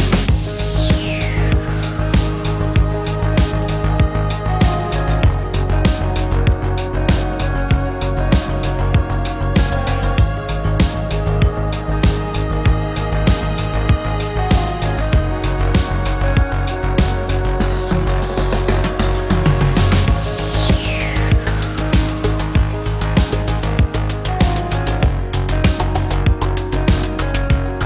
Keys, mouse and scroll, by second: 14.1-15.3 typing, 27.1 9.